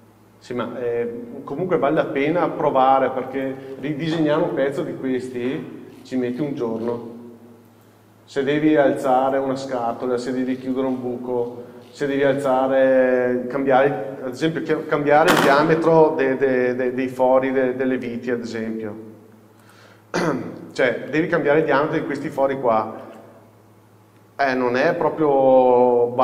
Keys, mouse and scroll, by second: 1.6-2.1 scroll down 1, 2.1 middle click, 14.8 KP_7, 16.4 scroll up 1, 17.0 z, 20.3 scroll up 1, 23.2 alt+a, 25.0 1, 25.4-26.2 scroll up 1.